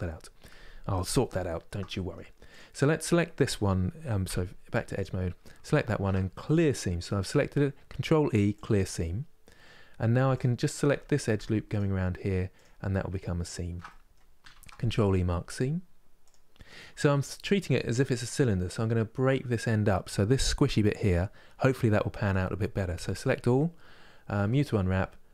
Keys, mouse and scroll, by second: 1.0-2.2 shift+middle drag, 2.2 click, 3.9 2, 4.6 click, 8.3 ctrl+e, 8.7-10.0 middle drag, 10.0 alt+click, 11.4 alt+shift+click, 12.2 alt+shift+click, 13.1 alt+shift+click, 13.7-15.9 middle drag, 15.9 ctrl+e, 16.4 middle click, 16.9-17.3 scroll down 1, 17.3-22.7 middle drag, 22.7 a, 25.0 u.